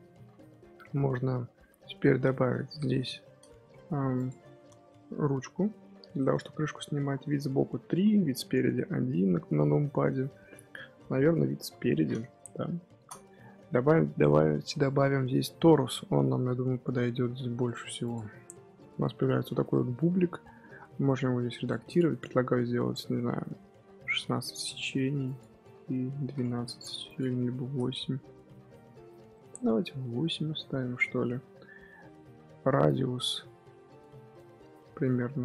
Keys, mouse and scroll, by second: 1.3-2.0 middle drag, 2.0 Tab, 2.7 3, 3.1 shift+s, 3.5 Tab, 3.8 middle click, 4.0 scroll up 1, 4.1 click, 4.3-5.9 scroll down 4, 5.9 KP_3, 7.0 scroll down 2, 7.2-7.8 middle drag, 7.8 KP_3, 8.2 KP_1, 11.4-12.9 scroll up 4, 12.9 shift+a, 18.9-21.0 middle drag, 21.0-24.9 drag, 25.2-29.3 drag, 29.3-30.9 middle drag, 30.9-31.7 scroll up 1, 31.7-32.8 middle drag, 32.8-35.4 drag.